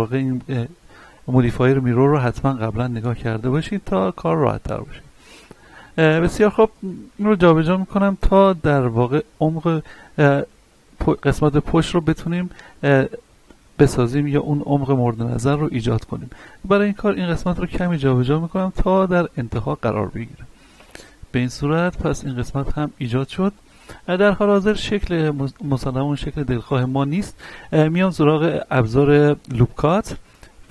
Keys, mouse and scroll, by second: 2.1-2.4 scroll up 1, 2.8 z, 4.4-6.2 scroll up 1, 6.3 z, 7.5-7.8 scroll down 1, 8.0 shift+middle click, 8.4 scroll up 1, 9.2-10.8 drag, 10.8 scroll down 1, 11.2 shift+middle click, 11.8-12.2 scroll up 1, 13.8 ctrl+z, 14.9 scroll up 1, 16.0 shift+middle click, 17.1-19.5 drag, 19.5-19.8 scroll down 1, 19.8-21.3 middle drag, 21.3 scroll down 1, 21.7-30.1 shift+middle drag, 30.1-30.6 scroll up 1.